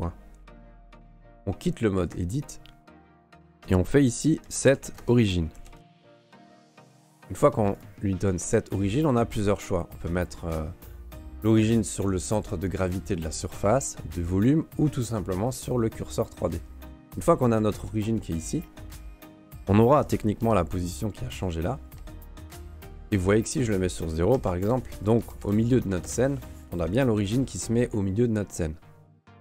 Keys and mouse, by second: 2.1 Tab, 3.6 space, 19.3 Tab, 19.9 Tab, 20.4 n, 22.0 n, 23.0 n, 24.0 click, 25.0 click, 25.8 click, 27.0 right click, 27.4 shift+middle drag.